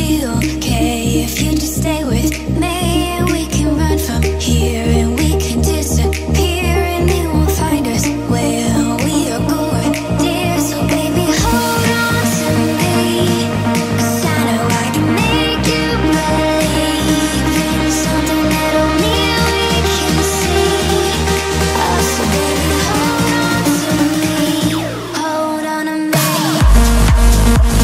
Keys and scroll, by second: 11.9 ctrl+a.